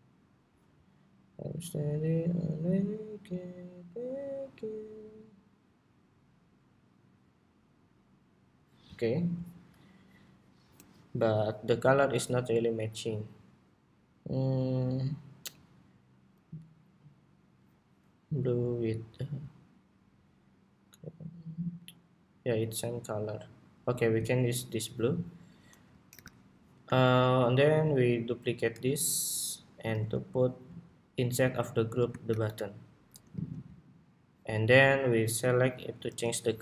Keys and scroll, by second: 25.8 super+=, 28.4 super+d, 29.6 super+x, 32.0 shift+super+v, 33.0 alt+c, 35.6 ctrl+c.